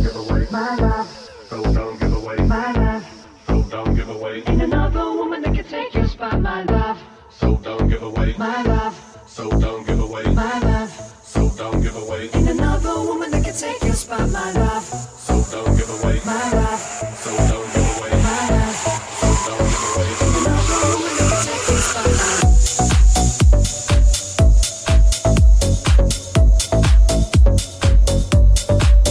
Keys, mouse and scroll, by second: 0.2 Tab, 4.0-13.0 shift+middle drag, 5.5 Tab, 6.2 /, 13.0-26.4 drag, 13.4 middle click, 13.4 right click, 16.0 middle click, 16.0 right click, 26.9 ctrl+click, 27.3-29.1 alt+drag, 27.7 alt+middle click, 27.7 alt+right click, 28.1 alt+middle click, 28.1 alt+right click, 28.5 alt+middle click, 28.5 alt+right click.